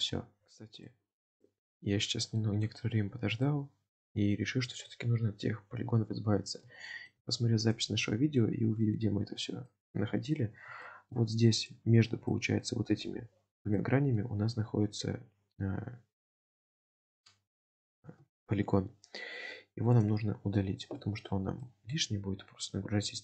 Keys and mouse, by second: 0.8 click, 1.4-2.5 middle drag, 3.5 shift+middle click, 5.0-7.2 middle drag, 7.7 click, 8.1-8.5 middle drag, 9.5 shift+middle click, 10.5 alt+z, 10.9 shift+middle click, 12.2 alt+z, 12.4 middle click, 13.8 middle click, 21.0 shift+middle click, 21.6 shift+middle click, 22.4 alt+z.